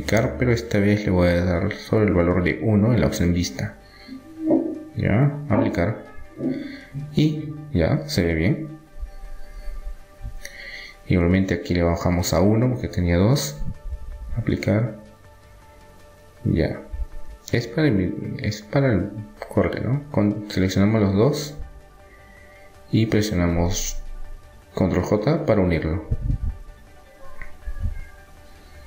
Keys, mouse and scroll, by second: 6.0-7.5 drag, 6.9 Tab, 7.5 middle click, 7.8 middle click, 8.4-10.4 middle drag, 9.9 Tab, 10.4-13.1 drag, 12.1 right click, 14.9 Tab, 16.5 middle click, 17.5 Tab, 18.4 middle click, 19.1-20.8 drag, 20.8-22.4 middle drag, 24.4 middle click, 24.8 ctrl+j, 25.8 middle click, 26.4 Tab, 28.0 a, 28.6 a.